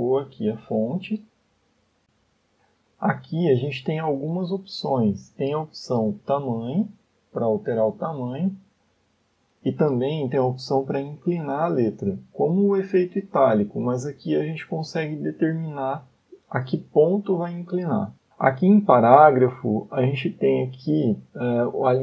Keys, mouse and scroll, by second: 2.1 shift+middle click, 5.0-5.5 scroll down 6, 6.7 click, 9.5 click, 13.3 click, 17.4 scroll down 5.